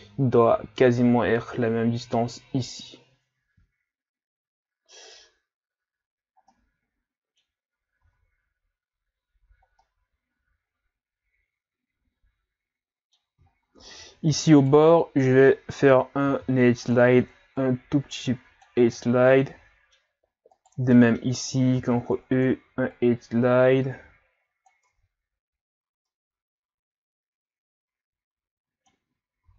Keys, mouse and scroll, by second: 5.1 Tab, 5.9 a, 6.5-7.7 middle drag, 7.7 scroll up 1, 8.0 Tab, 9.8-12.8 middle drag, 13.5-14.5 scroll up 4, 14.5 alt+right click, 16.2 ctrl+e, 18.9-20.5 middle drag, 20.5 alt+right click, 20.9 middle click, 21.8 ctrl+e, 24.9 Tab, 25.6-26.1 scroll down 2, 26.1-29.0 middle drag, 29.2 scroll up 1, 29.4 Tab.